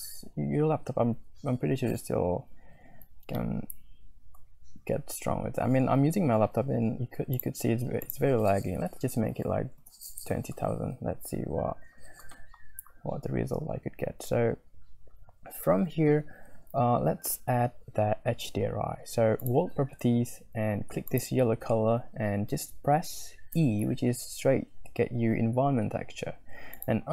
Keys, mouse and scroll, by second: 3.8 middle click, 4.0 click, 4.6 middle click, 4.6 scroll up 1, 5.1 z, 7.4 click, 8.0-10.4 right drag, 11.2-12.3 middle drag, 11.5 z, 17.1 z, 21.1-23.9 middle drag, 26.7 click.